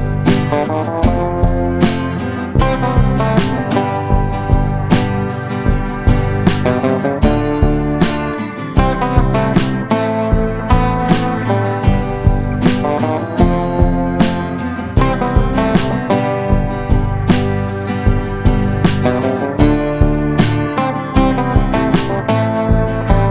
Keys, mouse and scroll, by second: 0.4 middle click, 1.6 click, 2.7 shift+g, 3.4 middle click, 4.1 x, 6.4 a, 7.0 3, 7.3 middle click, 8.8 i, 9.4 click, 11.9-13.0 drag, 13.4 middle click, 14.4 alt+s, 17.7 click, 18.1 Tab, 18.9-20.8 drag, 22.1 click, 22.4-23.3 drag.